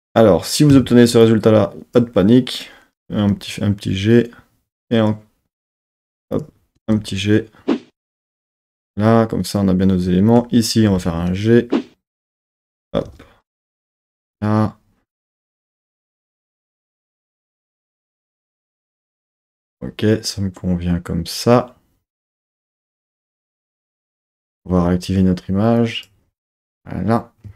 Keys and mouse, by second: 1.2 click, 3.0 g, 5.8 click, 6.8 g, 8.2 click, 10.3 click, 10.8 g, 11.0 g, 12.1-13.5 drag, 12.9 g, 13.1 g, 14.0 click, 18.2 KP_1, 18.5 KP_3, 23.5 KP_1, 23.9 KP_3, 25.8 click.